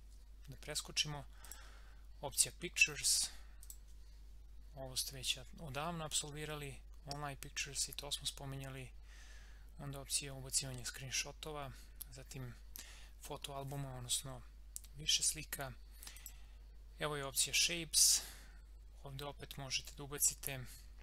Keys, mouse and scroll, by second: 16.1 click.